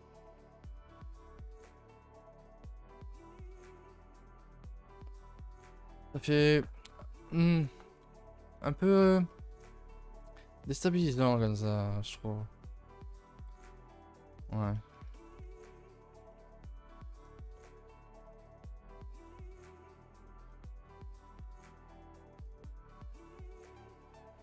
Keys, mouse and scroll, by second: 0.2-0.8 middle drag, 0.8-1.3 scroll up 4, 1.3-1.9 middle drag, 1.9 scroll up 2, 2.7-6.8 middle drag, 9.3-10.0 middle drag, 10.0 scroll up 1, 10.2-10.8 middle drag, 10.8 scroll down 2, 11.0-14.1 middle drag, 14.4 click, 14.7-15.3 middle drag, 15.3 scroll up 4, 15.4 Tab, 15.6-16.4 middle drag, 16.6 middle click, 16.6 middle click, 16.8 middle drag, 17.0-18.5 typing, 17.3-17.9 shift+middle drag, 18.0 middle drag, 18.5-19.8 middle drag, 19.8 middle click, 20.7 alt+click, 21.0 middle click, 21.2 middle click, 21.6 a, 21.8 a, 22.1 3, 22.2 click, 22.5 alt+click, 22.8 middle click, 24.1 middle click.